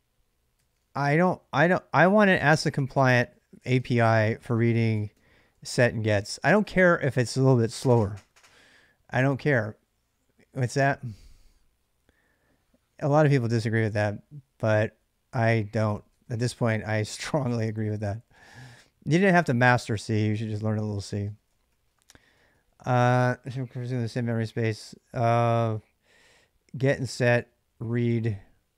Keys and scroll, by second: 0.0-5.9 typing, 0.4 ctrl+[, 0.8 Return, 4.3 ctrl+[, 15.6-18.9 typing, 20.9 ctrl+[, 21.0-22.3 typing, 24.5 j, 24.7 j, 24.8 j, 27.2-28.7 typing.